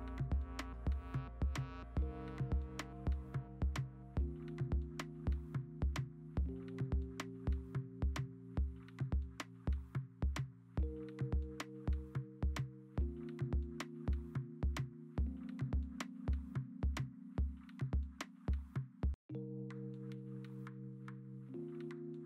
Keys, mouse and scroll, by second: 0.0-0.6 scroll, 0.6 Escape, 5.3-5.9 scroll, 6.3 ctrl+Tab, 7.1 b, 7.7 w, 8.2 ctrl+d, 8.4 ctrl+j, 9.1 w, 9.9 ctrl+d, 10.8 e, 11.6 ctrl+z, 11.8 0, 15.4 w, 15.7 Delete, 15.8 ctrl+d, 16.4-16.8 scroll, 16.8 w, 17.0 w, 17.8 ctrl+j, 18.7 x, 18.8 alt+BackSpace, 19.3 x, 19.9 b, 20.5 x, 20.9 ctrl+z.